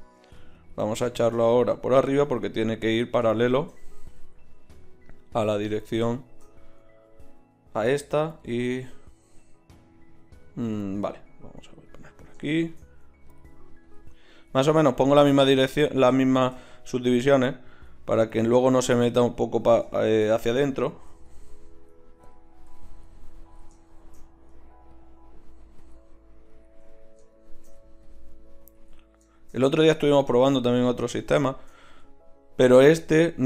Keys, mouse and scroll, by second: 8.4-10.1 drag, 11.2-20.0 drag, 20.0-21.2 middle drag, 21.2-26.0 drag, 26.8-33.4 drag.